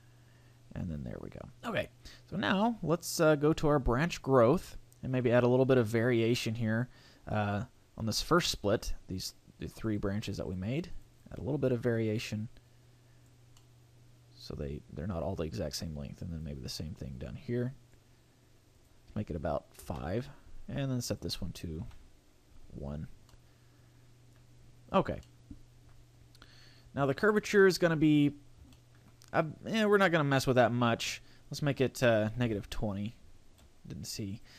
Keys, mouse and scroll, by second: 2.4-4.0 scroll up 3, 2.9 click, 8.2 middle click, 9.8 click, 10.4 click, 10.9 click, 11.4 click, 11.6 click, 11.9 click, 13.6 middle click, 16.4 click, 18.7 click, 21.0 click, 22.9 scroll down 4, 23.3 middle click, 24.5-24.9 scroll up 4, 25.2 middle click, 26.4-27.0 scroll down 3, 27.2 shift+middle click, 27.6 middle click, 28.4-28.7 scroll up 3, 28.7 shift+middle click, 29.0 shift+scroll down 1, 30.4 click, 34.3 click.